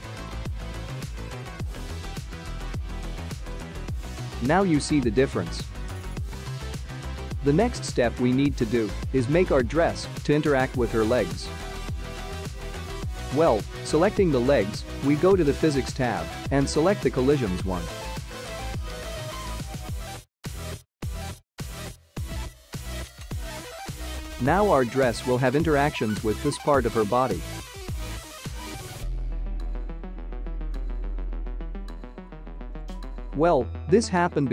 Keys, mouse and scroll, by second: 0.6 click, 3.4 space, 5.9-6.5 scroll up 3, 7.4-9.4 scroll down 2, 14.0 space, 14.9 click, 16.2 click, 19.1 click, 20.2-20.6 scroll down 3, 23.0 click, 23.7 middle click, 24.4 space, 27.7 middle click, 31.2 space, 33.6 space, 34.2 space.